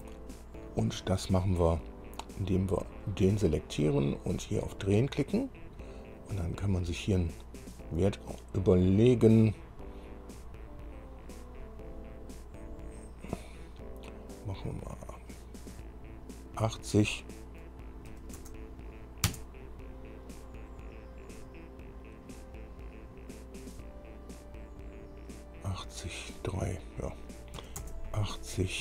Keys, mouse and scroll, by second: 2.5 scroll down 2, 3.1 click, 4.6 click, 18.3 KP_8, 19.5 KP_Enter, 27.8 KP_8, 28.0 KP_0.